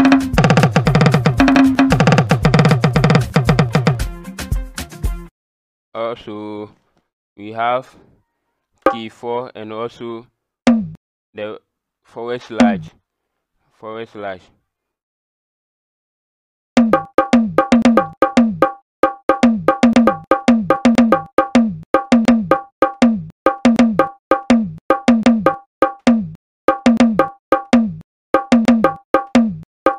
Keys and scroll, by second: 0.0-3.4 typing, 8.8 KP_4, 10.6 KP_Divide, 12.5 KP_Divide, 16.7 KP_Divide, 16.9 KP_4, 17.3 KP_Divide, 19.3 KP_4, 19.9 KP_Divide, 20.3 KP_4, 20.7 KP_4, 21.1 KP_4, 21.5 KP_Divide, 22.1 KP_Divide, 22.5 KP_4, 23.4 KP_4, 24.9 KP_4, 25.1 KP_Divide, 25.5 KP_4, 26.1 KP_Divide, 26.7 KP_4, 27.7 KP_Divide, 28.8 KP_4, 29.4 KP_Divide.